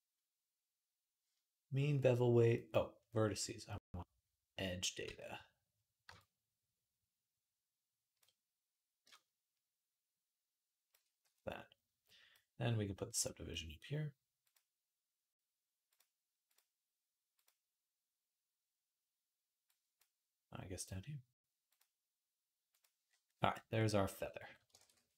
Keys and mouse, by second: 4.8 Tab, 12.2 right click, 13.4 right click, 15.8 right click, 16.3-19.8 middle drag, 19.8-21.5 right drag, 21.5-23.8 middle drag, 24.6 ctrl+s.